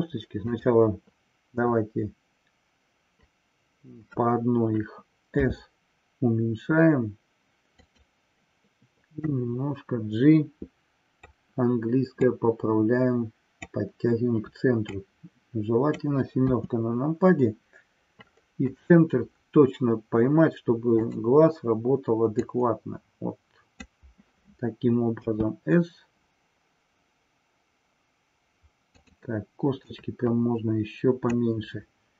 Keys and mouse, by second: 0.6 click, 7.8 click, 9.3-11.3 drag, 12.2-13.8 drag, 14.9-16.2 drag, 16.5 KP_7, 20.9 click, 22.3-23.7 drag, 29.8-31.2 drag.